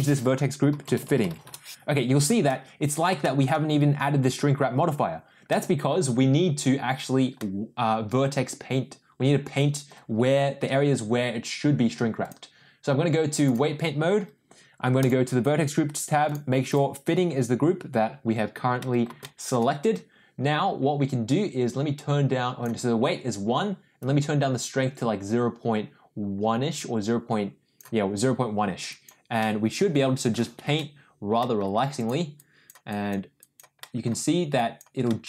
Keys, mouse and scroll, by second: 1.0 t, 2.4 middle click, 3.2 middle click, 5.5 middle click, 7.3-9.9 middle drag, 12.2-13.6 drag, 15.0 click, 16.2 click, 16.6 click, 18.8 middle click, 19.2 shift+middle click, 21.9 click, 24.0-27.8 drag, 28.9 click, 29.4 middle click, 31.0 ctrl+z, 31.4 middle click, 31.9 click, 32.3 click, 32.9 click, 33.3 click, 33.7 middle click, 34.5 click, 35.0 middle click.